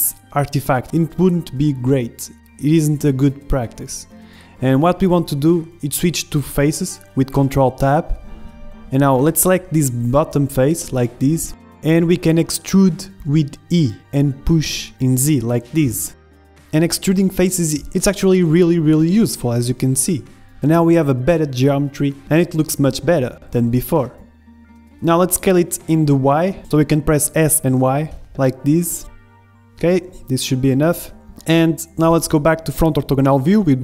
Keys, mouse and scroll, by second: 1.5-2.7 middle drag, 2.5 ctrl+z, 3.0 ctrl+z, 3.3 ctrl+z, 3.5 ctrl+z, 3.8-5.3 middle drag, 4.9 ctrl+Tab, 6.3 ctrl+Tab, 7.6 ctrl+Tab, 9.5 click, 10.2-11.8 middle drag, 11.8 KP_1, 12.3-13.8 middle drag, 12.3-13.8 scroll up 1, 12.7 e, 15.5-17.4 middle drag, 19.4 middle click, 20.1 click, 20.7 middle click, 20.7 KP_1, 20.7 click, 21.9-25.9 middle drag, 24.3 s, 28.2-29.9 middle drag, 28.7 z, 29.2 z, 29.4 KP_1, 30.6 z, 31.2-33.8 middle drag.